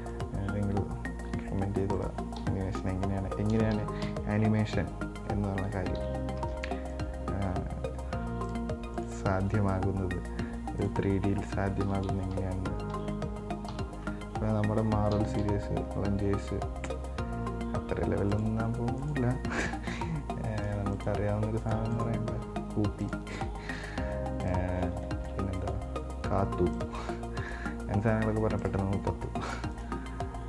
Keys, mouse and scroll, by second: 0.4 right drag, 1.5 r, 2.6 KP_1, 3.2 KP_Enter, 4.0 KP_3, 4.2 KP_9, 6.2 KP_1, 7.2 right click, 7.7 r, 9.2 right click, 9.6 r, 12.0 KP_1, 12.3 KP_3, 12.6 KP_9, 13.9 KP_9, 15.4 KP_3, 15.6 KP_9, 16.6 r, 19.2 right click, 19.7 r, 21.2 right click, 21.9 right click, 22.2 right click, 22.5 r, 23.5 right click, 24.0 r, 25.2-25.9 shift+middle drag, 25.9 right click, 26.3 r, 27.7 right click, 28.0 r, 30.0 right click, 30.3 r.